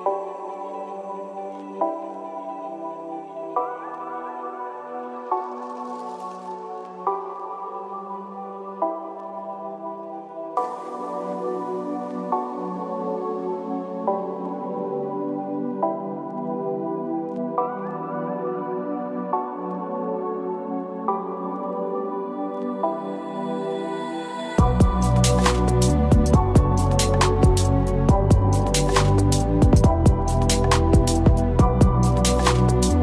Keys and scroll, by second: 1.8 ctrl+=, 5.5 ctrl+-.